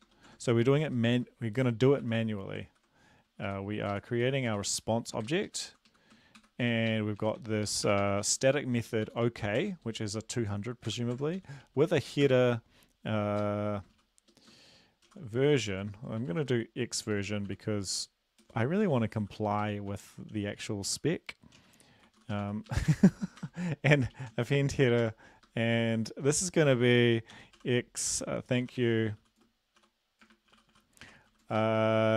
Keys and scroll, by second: 5.8 Left, 6.1 Left.